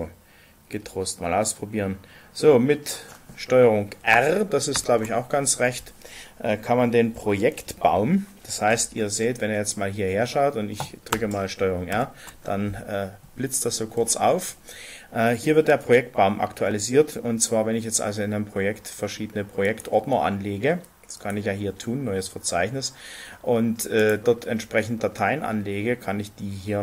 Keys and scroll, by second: 4.7 ctrl+r, 11.8 ctrl+r.